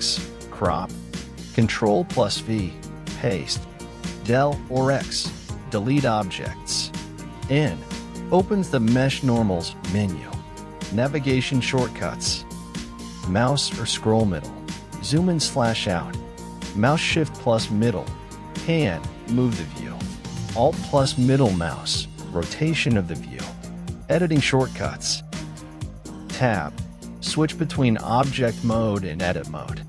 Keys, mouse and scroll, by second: 0.0-2.7 shift+middle drag, 2.7-3.3 scroll up 7, 3.6-4.8 scroll down 9, 5.0-5.8 scroll up 9, 5.8-7.8 scroll down 7, 7.8-10.5 ctrl+middle drag, 11.5-14.3 middle drag, 15.9 Tab, 16.2 Tab, 17.0 middle click, 17.7 Tab, 18.4-18.9 scroll up 4, 18.9 Tab, 19.0 Tab, 19.5 Tab, 20.3 Tab, 21.3 Tab, 23.7-25.5 shift+middle drag, 25.5 ctrl+Tab.